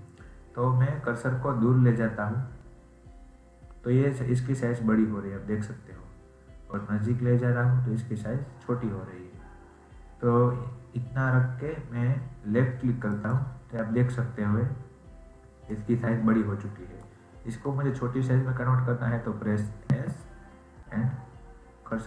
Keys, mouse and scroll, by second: 15.7-18.7 middle drag.